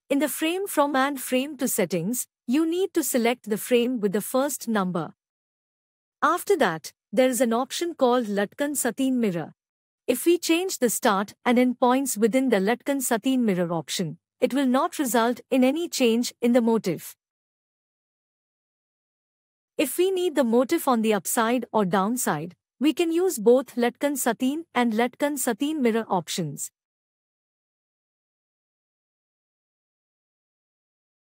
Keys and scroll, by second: 14.0 ctrl+e.